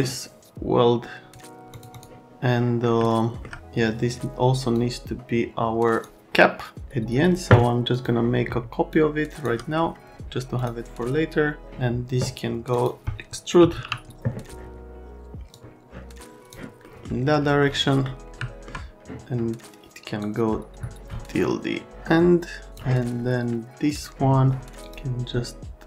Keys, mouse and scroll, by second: 1.7 click, 1.9 click, 2.8 middle click, 2.9 alt+right click, 4.7 middle click, 6.1 alt+right click, 7.9 click, 8.9 shift+click, 10.5 click, 12.7 click, 13.4-14.2 typing, 15.5 click, 16.8 middle click, 18.0 right click, 20.2 click, 23.9 click, 24.8 click.